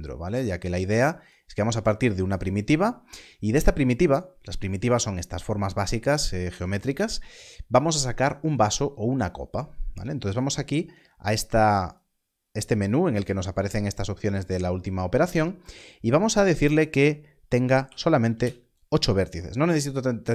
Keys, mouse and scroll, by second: 1.0 shift+a, 11.8 click, 18.3 Return.